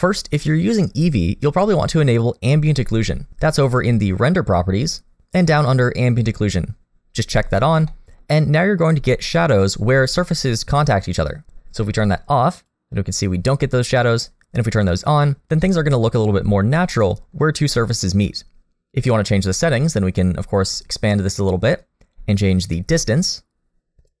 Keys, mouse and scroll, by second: 4.8 click, 7.2 click, 7.9 middle click, 8.4-9.3 scroll up 4, 9.1 middle click, 12.6 click, 14.4 click, 16.6 scroll down 1, 16.9 middle click, 19.5 click, 22.1 click.